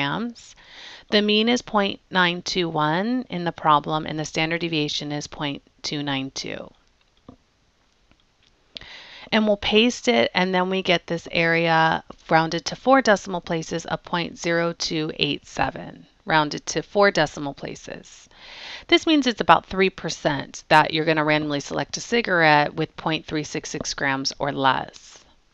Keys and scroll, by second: 1.2 Down, 6.8 Down, 7.2 Down, 8.2 Return, 10.0 Return.